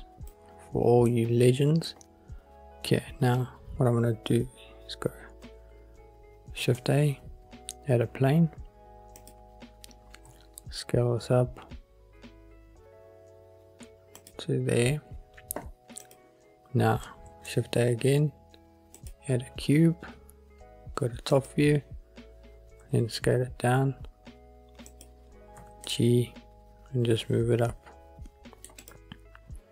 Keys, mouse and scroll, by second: 1.2-2.0 middle drag, 6.7 shift+a, 10.4 s, 14.3-16.3 drag, 17.4 shift+a, 21.5 click, 22.9 s, 25.0 click, 25.7 g, 26.0 middle click, 28.8 scroll up 1, 28.9 click.